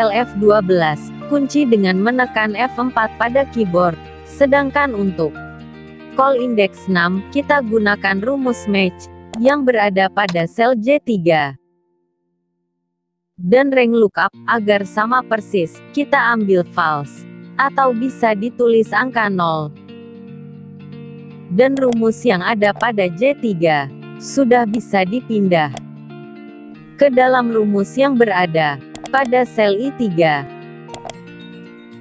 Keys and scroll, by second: 0.7 F4, 25.4 ctrl+c.